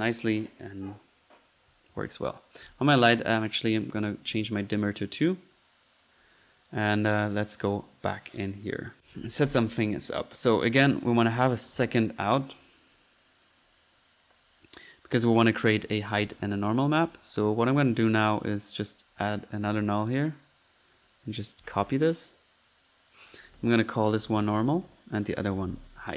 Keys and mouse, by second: 2.7 click, 3.5 click, 5.5-6.1 drag, 6.3 drag, 6.8-7.1 drag, 7.4 click, 8.4 click, 9.9-10.9 drag, 11.3-12.1 typing, 12.4-13.6 drag, 13.6-14.0 drag, 15.7 middle click, 17.1-18.2 drag, 18.9 right click, 19.4-20.1 typing, 20.5-20.8 drag, 21.0 ctrl+click, 21.4-22.3 typing, 22.1 ctrl+click, 22.7 ctrl+click, 23.1 ctrl+click.